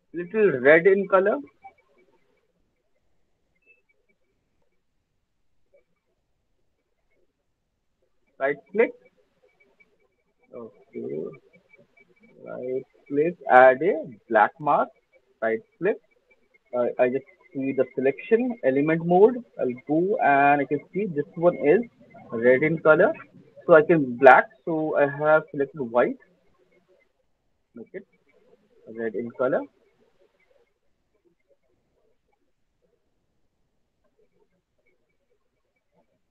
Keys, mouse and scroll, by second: 2.4 click, 5.7 click, 11.0 click, 11.1 right click, 11.3-12.3 scroll, 12.5 right click, 14.2 click, 15.5 click, 18.5 click, 20.7 click, 20.9-23.0 drag, 26.4 click, 29.3 alt+right click, 29.3 alt+middle click, 29.5 click, 30.2 click, 30.8 click, 32.3 alt+click, 32.4 alt+click, 32.8 click, 33.6 click, 34.2 click, 35.1 alt+click, 35.9 click.